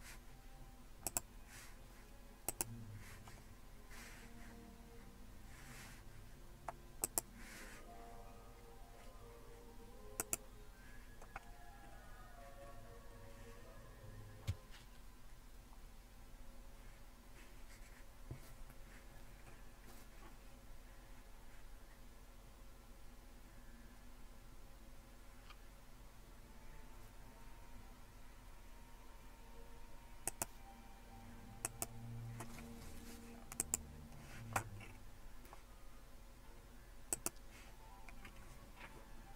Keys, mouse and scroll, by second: 1.1-3.7 drag, 7.0-8.3 drag, 10.2-11.4 drag, 11.9-12.6 scroll down 1, 12.6-14.2 scroll up 1, 30.3 click, 31.7 click, 32.7 click, 33.6-34.8 drag, 34.8-37.0 scroll down 2, 37.1-39.2 drag.